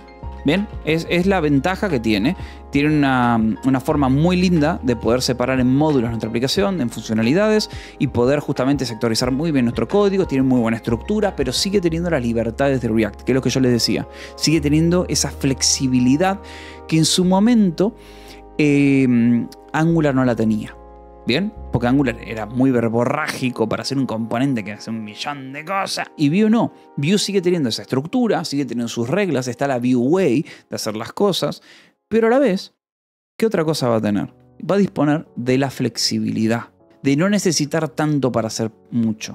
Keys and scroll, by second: 0.0-4.3 typing, 2.1 Escape, 4.6 Escape, 5.5 ctrl+s, 5.7 j, 6.4 o, 7.0 :, 7.1 space.